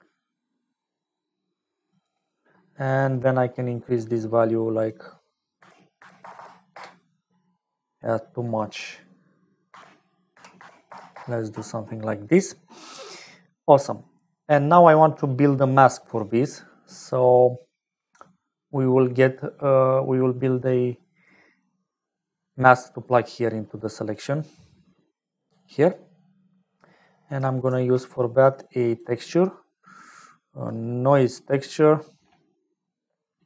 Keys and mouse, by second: 4.6-7.4 drag, 6.3 KP_0, 8.6-11.7 drag, 13.8 middle click, 23.5 click, 25.3 click, 26.2 middle click, 27.2 middle click, 27.7 shift+a, 31.8 middle click, 32.4 middle click.